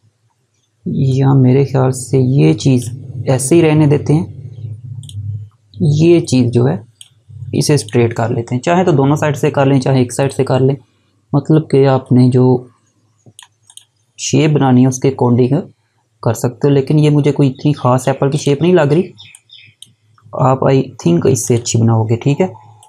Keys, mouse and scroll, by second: 1.1 click, 18.3 click, 20.5 scroll down 1, 21.4 click.